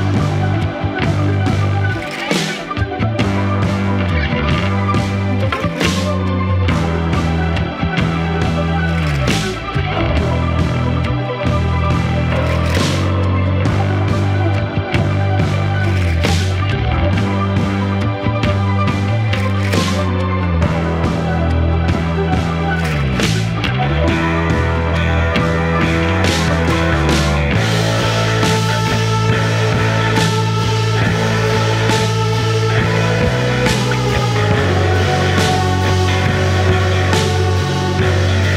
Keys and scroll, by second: 2.7 4, 15.9 shift+i, 36.4 ctrl+d, 36.7 Escape.